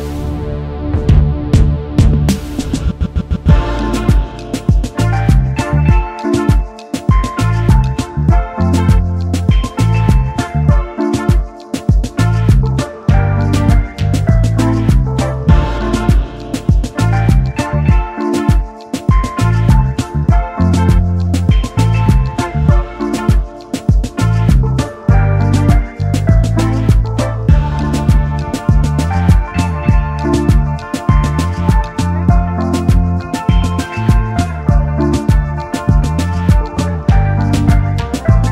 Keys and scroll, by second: 2.5 ctrl+v, 6.0 ctrl+s, 9.8 ctrl+s, 28.5 Return, 28.5 ctrl+z, 28.5 0.